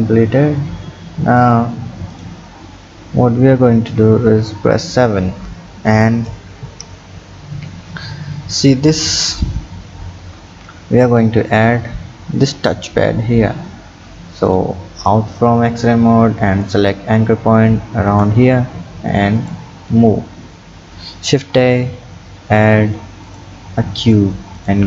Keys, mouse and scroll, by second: 2.1 click, 4.3 KP_7, 6.2 click, 9.0-10.0 drag, 10.0 scroll up 3, 14.5 drag, 16.7 click, 18.1 click, 19.4 click, 21.3 shift+a, 24.6 click.